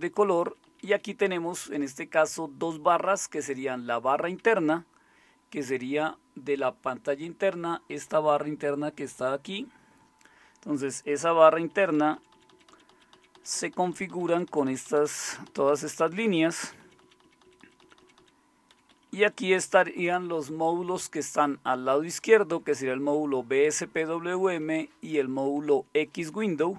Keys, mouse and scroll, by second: 0.3 Down, 0.4 Down, 0.6 Down, 0.9 Down, 11.7 Down, 12.0 Down, 12.1 Down, 12.3 Down, 12.5 Down, 12.7 Down, 12.9 Down, 13.5 Down, 13.7 Down, 14.1 Down, 14.5 Down, 14.8 Down, 15.0 Down, 15.4 Down, 15.7 Down, 16.1 Down, 16.2 Down, 16.4 Down, 16.6 Down, 16.8 Down, 17.0 Down, 17.2 Down, 17.4 Down, 17.6 Down, 18.0 Down, 18.2 Down, 18.7 Up, 18.9 Up, 19.1 Up, 19.2 Up, 19.4 Up, 19.6 Up, 20.3-24.4 Right, 25.1 Right, 25.9 Right, 26.3 Right.